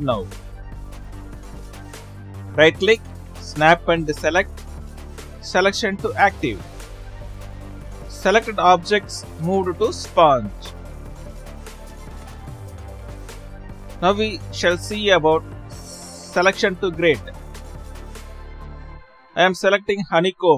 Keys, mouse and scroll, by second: 9.2 right click, 10.6 ctrl+z, 12.2 right click, 12.6 shift+s, 13.7 ctrl+z, 15.9 Left.